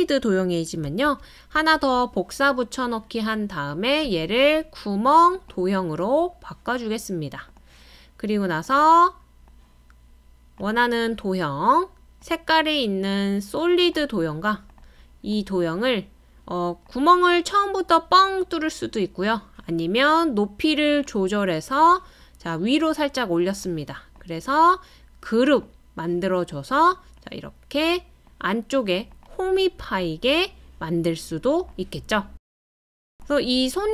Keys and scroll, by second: 1.0 super+c, 1.5 super+v.